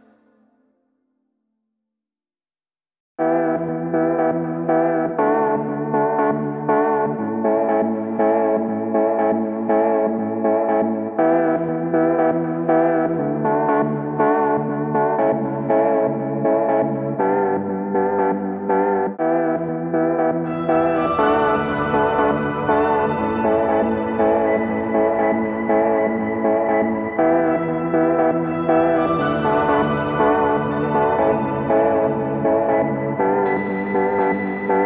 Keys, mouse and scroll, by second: 0.7 ctrl+h, 3.2-4.3 alt+middle drag, 4.3-5.6 drag, 6.9 click, 7.6 click, 8.2 alt+middle click, 8.7 ctrl+h, 9.9 alt+middle click, 11.6 click, 12.4 click, 14.3 alt+middle click, 16.7 click, 18.9 click, 19.6 alt+middle click, 20.6 click, 21.9 alt+middle click, 23.2 alt+scroll, 24.3 click, 25.2 alt+scroll, 26.0-26.5 alt+scroll, 29.7 click, 31.2 alt+middle click, 33.6 click, 34.3 alt+middle click.